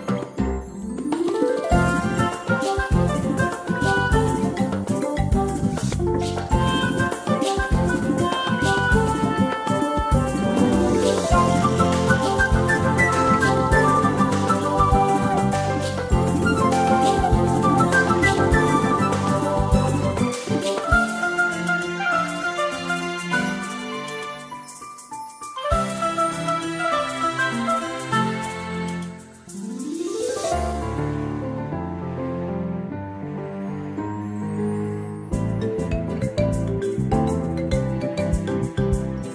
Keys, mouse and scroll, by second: 6.0 ctrl+scroll up 1, 6.6-7.4 scroll up 1, 7.5 ctrl+scroll down 1, 8.4 click, 8.7 space, 10.7 click, 14.9 space, 18.6 click, 21.8 click, 23.3 shift+click, 26.1 click, 35.5 space, 36.1 ctrl+scroll up 1, 38.3 scroll up 1.